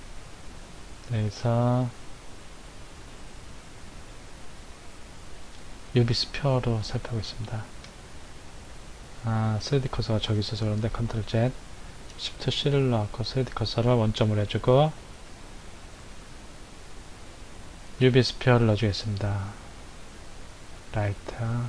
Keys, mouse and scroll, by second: 7.0 scroll down 2, 7.6-10.7 middle drag, 10.7 ctrl+z, 12.4 shift+c, 14.9 shift+a, 20.5 click, 21.2 click.